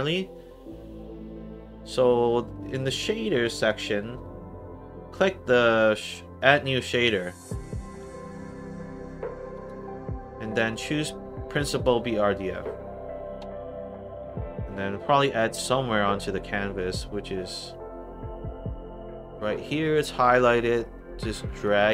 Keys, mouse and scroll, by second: 3.4 click, 3.6 click, 9.5 click, 11.7 click, 14.0 middle click, 15.3 scroll down 1, 15.7 middle click, 16.2 middle click, 16.7 middle click, 17.2 scroll down 1, 18.0-18.3 scroll up 2, 18.3 middle click, 19.5 click, 20.3 middle click, 21.3 click, 21.8 middle click.